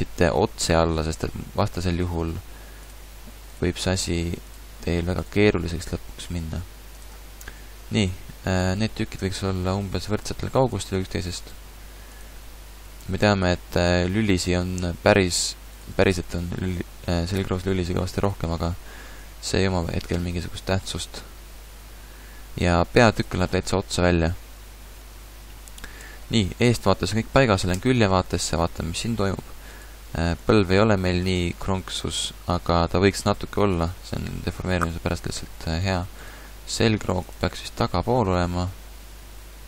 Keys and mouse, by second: 0.3 click, 2.0 g, 2.9 click, 3.8 g, 5.5 g, 8.9 g, 11.6 g, 12.9 g, 16.1 g, 21.8 g, 27.8 KP_3, 30.4 g, 31.3 click, 35.1-37.3 drag, 36.4 g, 38.0 g.